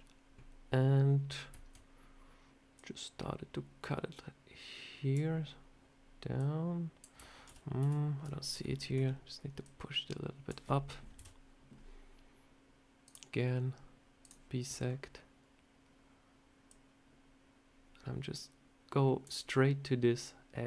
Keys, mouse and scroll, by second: 6.3 click, 7.4 ctrl+z, 7.7 ctrl+z, 8.5 middle click, 8.9 scroll down 1, 9.5 click, 11.1 KP_7, 12.9 click.